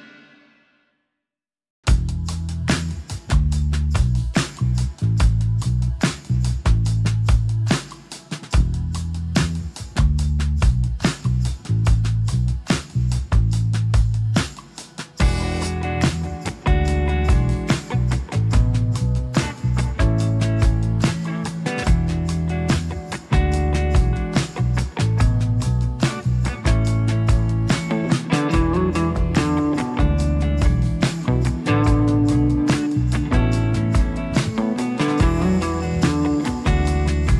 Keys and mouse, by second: 0.3 click, 0.8 g, 1.8 s, 2.9-4.6 drag, 4.6 f, 4.6 g, 4.8 f, 5.2 click, 5.7 click, 6.3 f, 6.7-8.0 drag, 8.0 1, 8.0 f, 8.1 click, 8.5 click, 9.0 click, 9.2 click, 9.7 click, 10.0 click, 10.2 click, 10.7 click, 10.9 click, 11.1 click, 11.3 click, 11.6 4, 11.6 f, 11.7 f, 12.1 click, 12.5-13.5 drag, 13.5 middle click, 13.6 Tab, 13.6 f, 13.6 1, 13.9 f, 14.3 click, 15.0 click, 16.2 click, 16.6 click, 16.9 f, 17.3 click, 17.5 f, 17.6 click, 17.9 click, 18.4 f, 18.9 ctrl+z, 18.9 middle click, 19.2 click, 19.5 click, 19.9 click, 20.2 middle click, 20.5 1, 20.6 f, 20.8 click, 21.3 middle click, 21.7 click, 22.1 click, 22.4 click, 23.2 ctrl+f, 23.2 ctrl+click, 23.6 ctrl+click, 24.7 ctrl+click, 25.4 shift+click, 25.6 shift+click, 25.9 shift+click, 26.3 middle click, 26.4 click, 26.8 shift+click, 27.1 shift+click, 27.3 shift+click, 27.7-28.7 drag, 30.1 ctrl+z, 30.1 4, 30.3 f, 30.5 click, 31.1 click, 31.6 click, 33.6 f, 34.1 r, 35.2 g, 36.7 ctrl+z, 36.7 click.